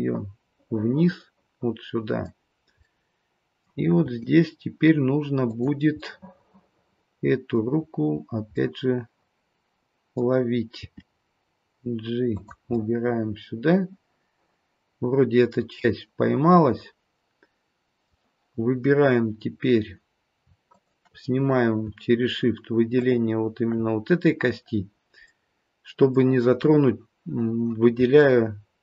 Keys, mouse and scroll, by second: 2.8 middle click, 4.0 g, 7.0 middle click, 7.8-8.5 scroll up 1, 8.5 middle click, 8.5-8.9 scroll up 3, 10.8 g, 12.7 middle click, 18.5-20.2 scroll down 1, 20.7 shift+click, 22.9 shift+click, 25.3 middle click, 28.2 shift+middle click.